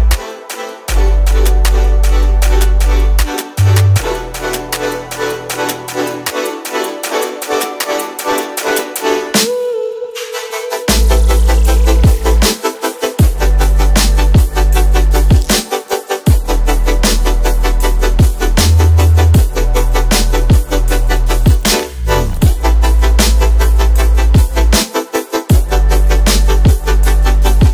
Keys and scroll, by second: 2.8 ctrl+alt+z, 3.3 ctrl+alt+shift+k, 4.1 space, 15.5 alt+shift+n, 23.6 space.